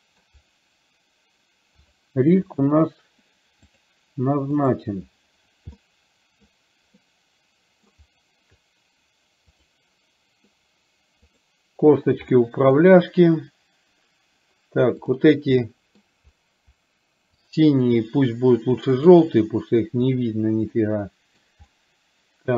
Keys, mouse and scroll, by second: 2.0 click, 2.5 click, 3.8 click, 4.7 click, 5.8-6.6 middle drag, 7.2-8.0 middle drag, 9.7 click, 11.3 click, 12.5 middle drag, 15.1 click, 15.7 middle click, 20.2 click, 20.8 middle click, 21.8-22.5 middle drag.